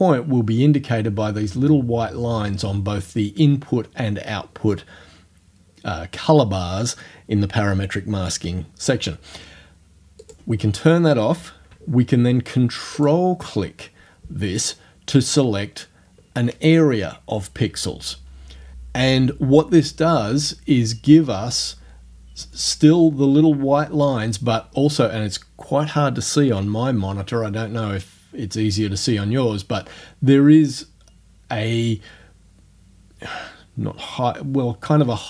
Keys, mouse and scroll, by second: 10.3 click, 10.5-13.0 middle drag, 13.0 ctrl+click, 13.3 ctrl+middle click.